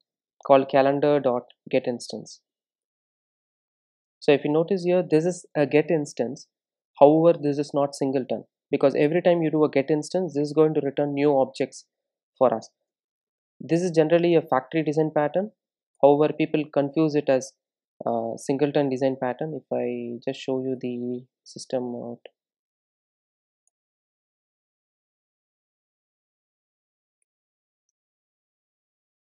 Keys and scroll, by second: 2.9 Return, 13.1 alt+Return, 19.4 super+d, 22.0 Tab, 25.7 Return, 27.9 Tab.